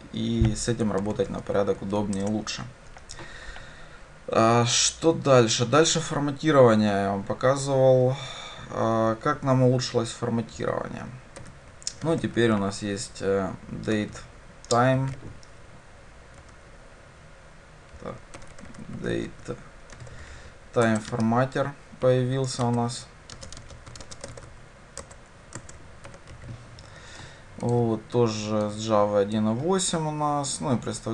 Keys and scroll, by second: 1.0 ctrl+y, 2.2 shift+Return, 21.0 Return, 27.8 ctrl+b.